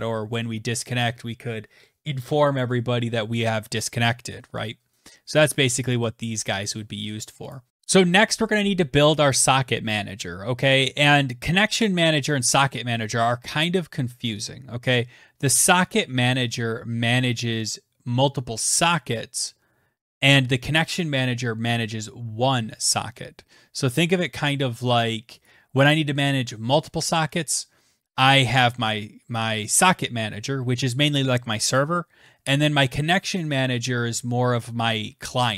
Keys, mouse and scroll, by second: 4.1 click, 5.3 click, 5.8 click, 6.9 click, 7.2 ctrl+s, 7.7 click, 24.9 click, 25.4 click.